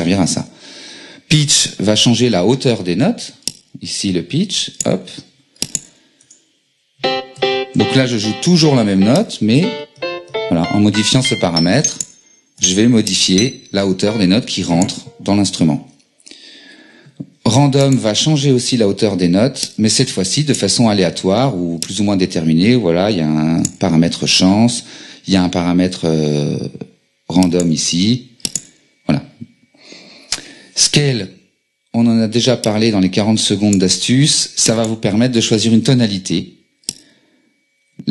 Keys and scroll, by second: 6.2 BackSpace, 7.0 q, 18.5 BackSpace, 35.4 BackSpace.